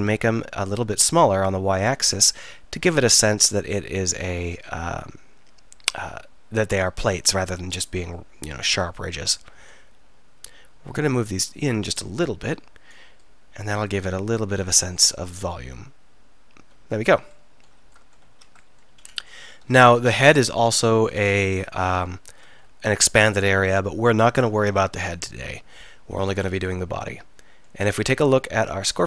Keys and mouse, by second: 2.2-3.6 drag, 4.1-5.4 middle drag, 7.2-9.6 middle drag, 12.4 right click, 15.2 middle click, 17.1 z, 18.3 z, 19.9-21.4 middle drag, 22.0-23.0 middle drag.